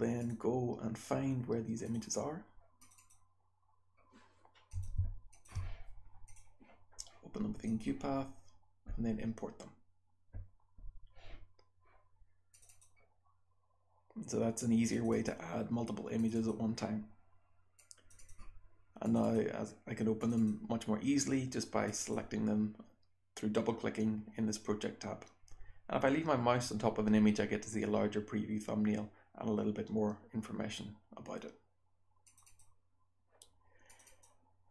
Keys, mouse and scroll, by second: 12.5-14.0 drag, 14.8 click, 16.1 click, 16.2-17.5 drag, 17.7 click, 19.0 click, 19.1-19.6 drag, 20.1 click, 20.3 click, 21.8 click, 21.9 click, 32.2 click, 32.4 click, 33.8 click, 34.0 click.